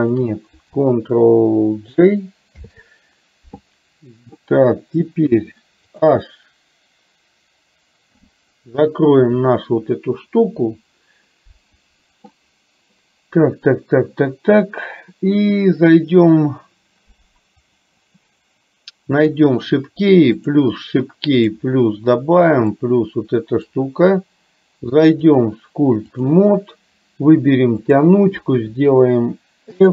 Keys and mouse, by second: 2.6 ctrl+j, 5.4 KP_3, 8.1 h, 20.5 click, 21.6 drag, 22.7-23.7 drag, 25.2-26.4 drag, 28.0 click.